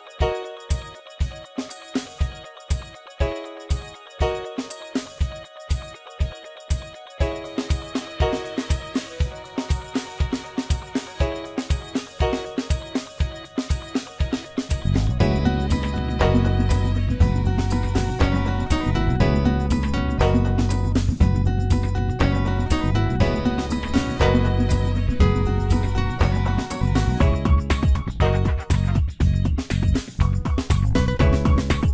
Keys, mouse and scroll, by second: 6.3 KP_1, 7.2-7.7 scroll up 1, 7.7-8.7 scroll up 1, 9.1-12.6 drag, 14.0-16.4 drag, 18.2 click, 19.4-22.4 drag, 22.7-25.8 drag, 25.9 click, 27.3-28.0 drag, 28.0 space.